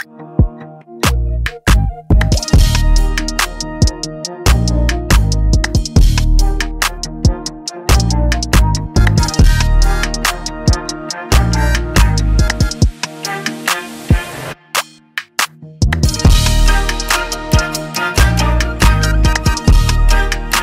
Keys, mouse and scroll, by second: 0.0-1.0 typing, 0.1 click, 0.8 click, 1.0 right click, 1.7 right click, 2.1 F8, 3.5 click, 4.6 End, 9.2 Home, 12.3 End, 14.9 BackSpace, 16.5 click, 16.5 BackSpace, 17.1 click, 17.5 click, 17.5-18.2 typing, 18.3 click, 18.8 click, 19.4-19.8 typing.